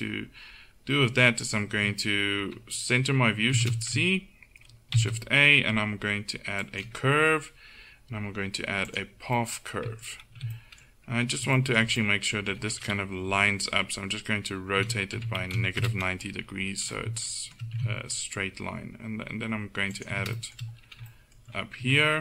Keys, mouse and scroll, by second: 3.6 shift+c, 5.0 shift+a, 9.5 middle click, 10.4 z, 13.4 KP_1, 14.8 r, 17.8 g, 21.9 Tab.